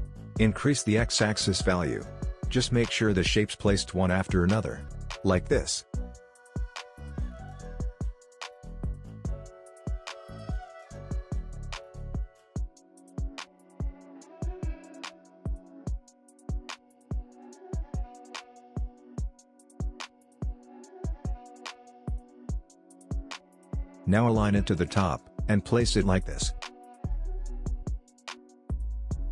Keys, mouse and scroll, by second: 1.3-9.7 drag, 9.7-11.3 scroll up 1, 13.1 click, 17.3 click, 20.2-21.4 scroll down 1, 21.4 click, 25.2-26.6 scroll down 1, 26.6-29.3 drag.